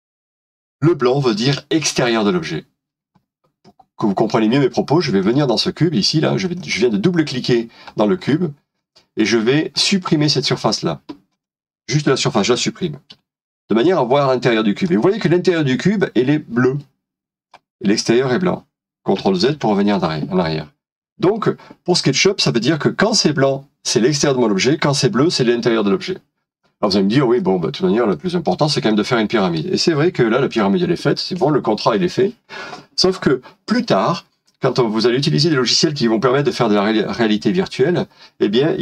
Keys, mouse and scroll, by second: 5.4 double click, 8.0-8.3 scroll up 1, 8.7 scroll down 1, 9.4 middle click, 13.3 Delete, 13.8 middle click, 19.6 ctrl+z, 20.4 middle click, 22.0 scroll down 1, 27.4 middle click, 28.5 scroll down 1, 28.9 middle click, 34.5 middle click.